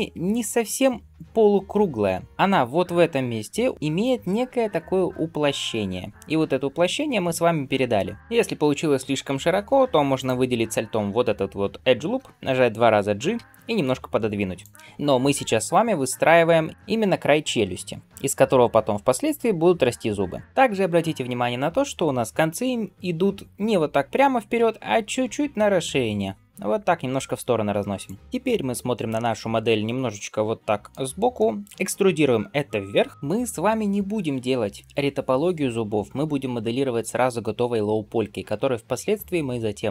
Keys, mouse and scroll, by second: 8.2 click, 10.0 alt+click, 29.7-31.8 middle drag, 31.9 e.